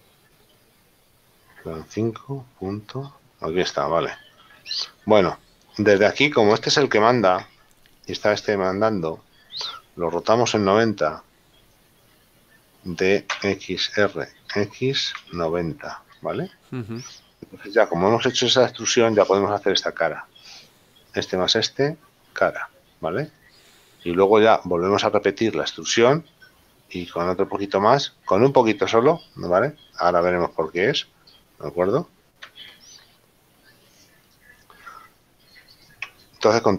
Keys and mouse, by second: 0.0 click, 2.6 KP_Decimal, 4.6 middle click, 13.3 r, 14.6 x, 15.3 KP_0, 16.3 Return, 16.3 KP_Enter, 23.7 shift+middle click, 32.4 x, 34.4 click, 36.1 Tab.